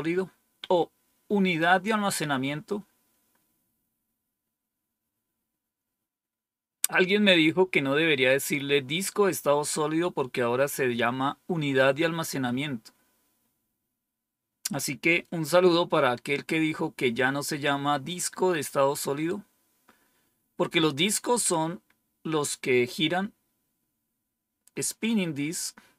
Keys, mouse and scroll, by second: 24.9-25.9 drag.